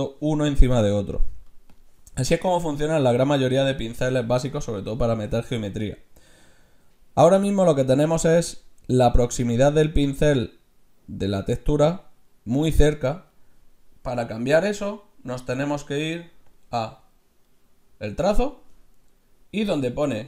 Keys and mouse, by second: 1.7-3.5 drag, 3.0 Tab, 13.9-15.0 middle drag, 16.5-18.2 drag.